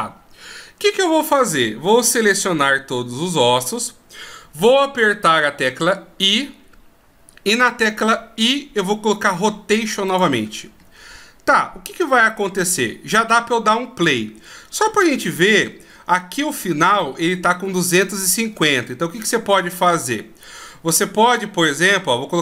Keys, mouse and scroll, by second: 2.9 a, 21.6 click.